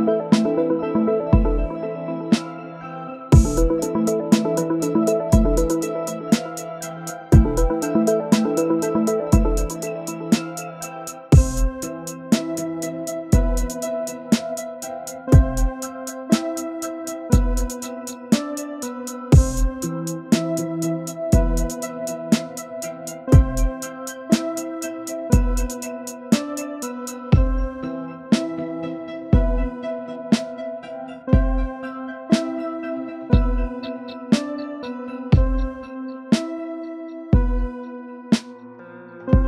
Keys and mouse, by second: 0.5 shift+middle click, 0.9 click, 1.4 s, 2.2 click, 4.6 click, 5.8 shift+middle click, 6.5-8.3 drag, 8.7 click, 9.3-10.3 drag, 10.6 click, 10.8 click, 12.2-14.0 drag, 15.0-16.3 drag, 16.6 click, 16.9 middle drag, 17.4 shift+click, 17.8 KP_3, 18.9 r, 19.9-20.4 middle drag, 20.8 ctrl+z, 21.5-22.7 drag, 22.9-24.6 middle drag, 24.8 click, 25.2 KP_1, 26.4 shift+click, 26.9-28.2 drag, 28.4-28.7 shift+middle drag, 29.0 shift+middle click, 29.3 middle click, 29.5 middle drag, 29.9 shift+middle click, 30.1-31.5 drag, 31.6 click, 32.9 click, 33.7 click, 34.5-35.6 drag, 36.6-38.3 drag, 38.5-39.4 middle drag.